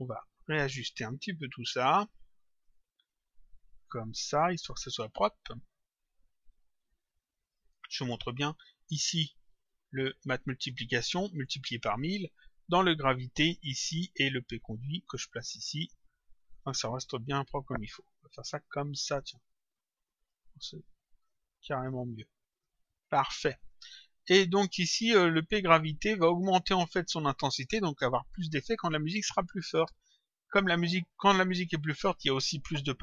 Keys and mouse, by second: 1.6 click, 3.6 click, 6.1 click, 8.9 click, 14.3 click, 17.0 click, 20.1 click, 23.5 click, 29.4 click.